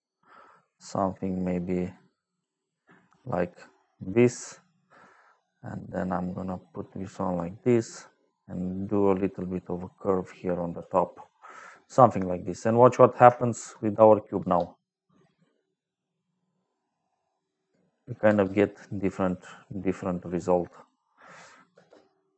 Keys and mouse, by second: 1.3 click, 2.9 click, 3.2 click, 5.9 click, 8.4 click, 13.3 shift+middle click, 13.8 middle click, 14.3 space, 17.3 middle click, 18.2 space, 19.1 click, 20.6 click, 21.6 space.